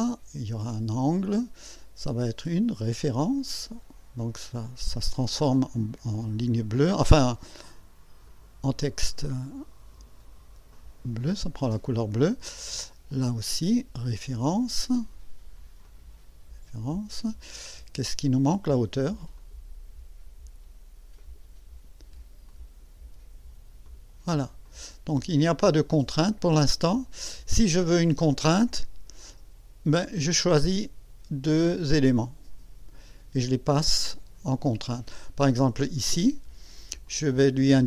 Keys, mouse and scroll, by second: 1.2 click, 3.0 click, 4.3 click, 8.2 click, 10.7 click, 13.1 click, 14.1 click, 15.8 click, 17.1 click, 19.4 click, 21.1 click, 22.5 click, 23.8 click, 24.6 click, 25.5-26.5 drag, 26.9 scroll down 2, 31.8-32.6 drag, 37.1 click.